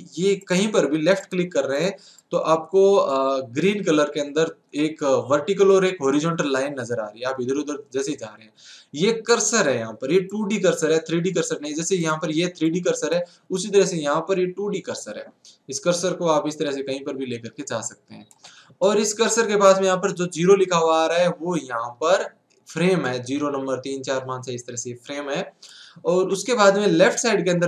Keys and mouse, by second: 0.0-4.0 drag, 10.3-15.3 drag, 23.0-24.9 drag.